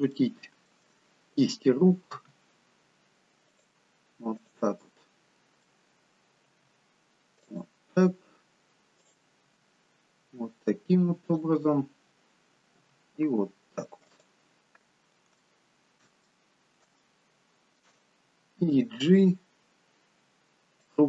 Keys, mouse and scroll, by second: 0.2 shift+middle click, 2.2 r, 4.4 click, 5.0 middle click, 6.5-7.4 scroll down 2, 6.5 r, 9.0 click, 9.5 r, 11.6 middle click, 12.9 r, 15.5 shift+middle click, 16.3 middle click, 17.0 shift+middle click, 19.0 g.